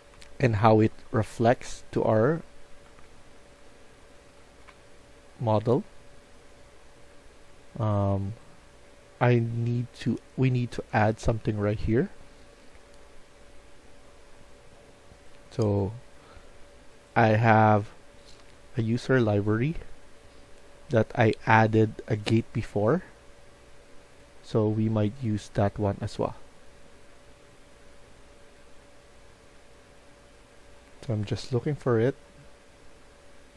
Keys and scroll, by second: 0.0-1.1 typing, 2.3-4.6 typing, 28.0 F1.